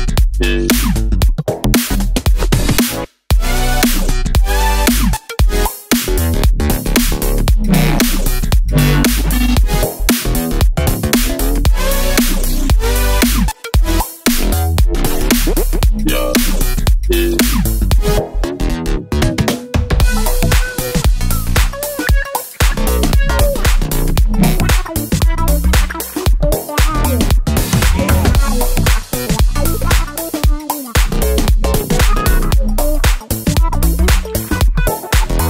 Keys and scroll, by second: 7.4 super+d, 8.7 super+d, 8.9 super+d, 8.9 super+d, 10.2 super+a, 19.6 super+a, 33.2 BackSpace.